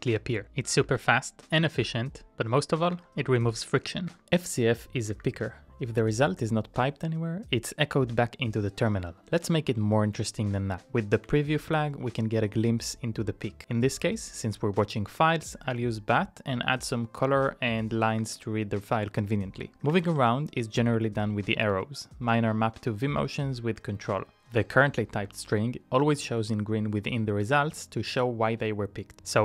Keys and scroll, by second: 0.0-0.7 typing, 1.0 Page_Up, 1.8 Page_Up, 2.9 Page_Up, 4.1 Page_Up, 5.3 Return, 11.1 BackSpace, 11.2 m, 19.0 Return, 19.0-20.8 typing, 21.7 Up, 23.2 Up, 25.2 Up, 27.1 Down, 27.7 Down.